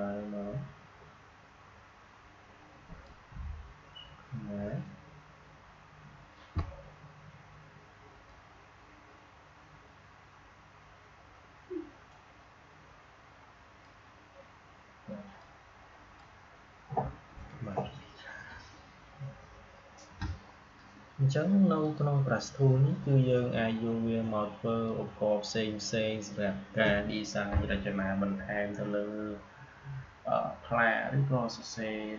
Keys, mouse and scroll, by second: 8.2-21.7 drag, 21.7 click, 24.8-32.1 drag.